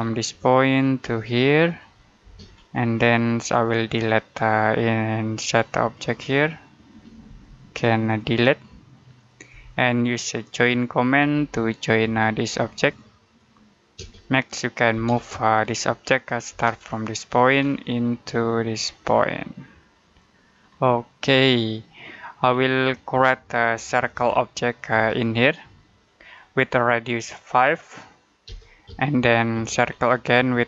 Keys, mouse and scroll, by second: 0.1 middle click, 1.5 click, 2.1 space, 2.4-3.3 scroll up 1, 3.4 click, 7.1 Delete, 7.9 click, 9.4 Delete, 11.1 j, 11.9 space, 12.6 click, 13.8 space, 14.8 m, 15.0 space, 15.5 click, 16.3 space, 17.2 click, 17.5 scroll down 1, 17.7 middle click, 18.2-19.3 scroll up 1, 19.9 click, 20.5-20.9 scroll down 1, 20.9 middle click, 22.2-23.0 scroll up 1, 23.0 middle click, 24.0 c, 24.8 space, 26.1 click, 28.3 5, 28.7 space, 29.7 scroll up 1, 29.9-30.6 scroll down 1.